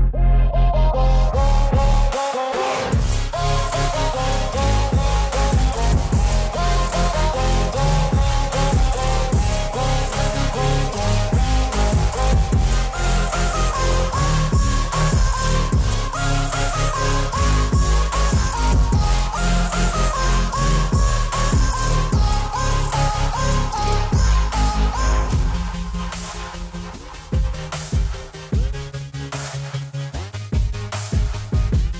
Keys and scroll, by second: 29.9 F4.